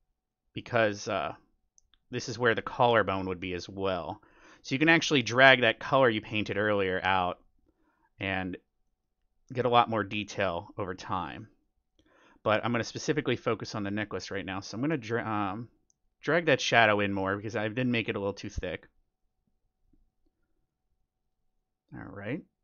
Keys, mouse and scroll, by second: 8.8-10.5 middle drag, 14.3-16.5 middle drag.